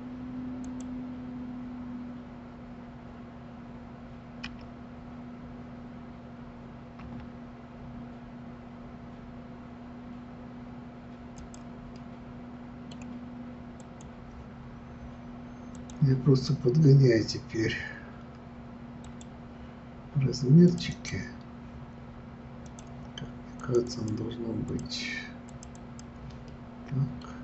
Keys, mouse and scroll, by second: 0.6 click, 4.5 s, 12.0-13.8 middle drag, 13.8 click, 15.7-18.8 drag, 20.7 click, 20.9 click, 22.7 click, 23.6 click, 23.8 click, 24.7 click, 25.5 click, 25.7 click, 26.5-27.4 middle drag.